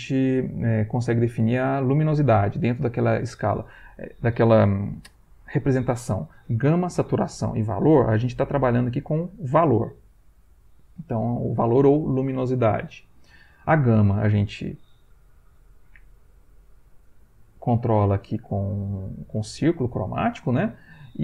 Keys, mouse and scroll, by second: 15.2-16.5 right drag, 16.5-21.2 drag, 21.0 Escape.